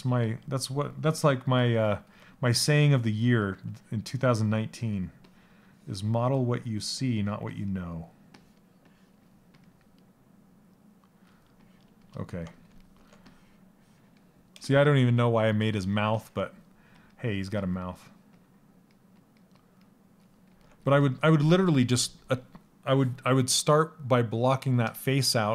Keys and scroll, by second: 15.0 s.